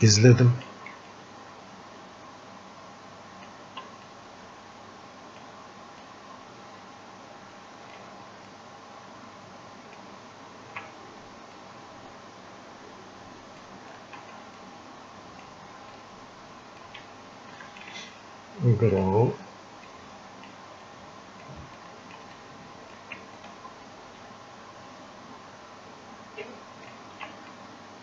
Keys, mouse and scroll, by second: 0.1 click, 1.1-4.1 ctrl+alt+shift+drag, 4.1-6.1 drag, 6.1-11.7 ctrl+alt+shift+drag, 11.7-13.9 drag, 13.9 alt+click, 14.6-15.9 drag, 15.9-20.9 ctrl+alt+shift+drag, 20.9 click, 21.8 alt+click, 22.4 click, 23.4-27.5 ctrl+alt+shift+drag, 27.5-28.0 drag.